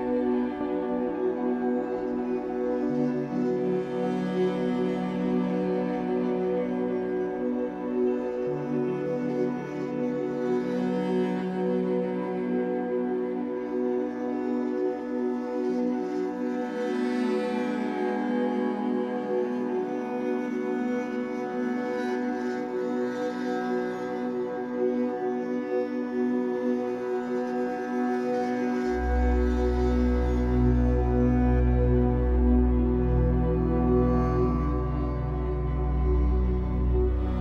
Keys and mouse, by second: 0.0 click, 1.1 click, 1.8 ctrl+alt+click, 2.3 alt+shift+click, 2.7 ctrl+alt+click, 4.1 ctrl+s, 5.0 ctrl+alt+click, 6.6 alt+shift+click, 7.5-8.6 alt+drag, 8.7-12.9 ctrl+alt+drag, 17.3-19.0 alt+drag, 23.6 click, 25.5 click, 26.6 ctrl+s, 28.4 click, 30.4 click, 31.6-33.4 drag, 33.7-37.4 drag.